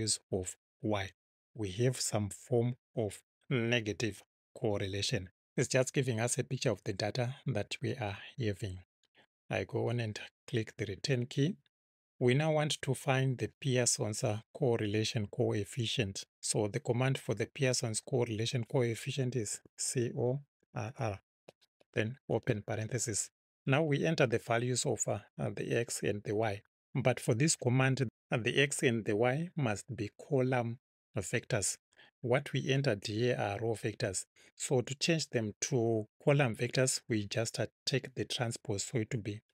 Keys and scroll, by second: 10.8 Return, 11.7 Return, 19.5 c, 20.0 o, 20.6 r, 22.3 shift+9.